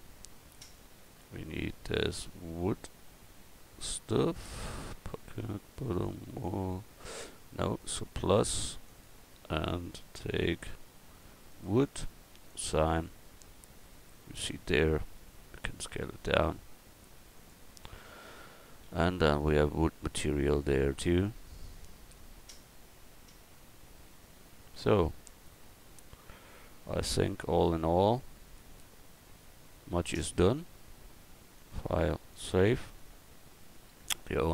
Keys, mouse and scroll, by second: 6.4-11.6 drag, 12.6-13.8 drag, 15.1 s, 18.1 Tab, 18.8 a, 22.3 middle click, 23.6 middle click, 24.1 middle click, 33.0 click.